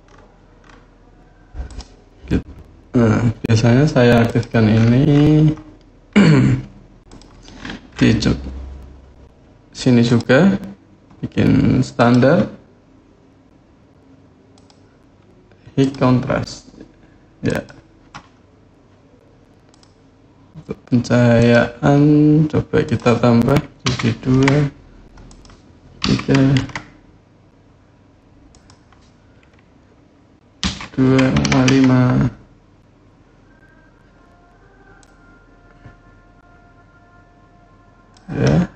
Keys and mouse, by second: 1.5 click, 4.0 click, 6.9 click, 9.8-11.9 drag, 14.3-15.7 drag, 17.2 click, 21.1 click, 22.7-33.0 drag, 34.8-37.9 drag.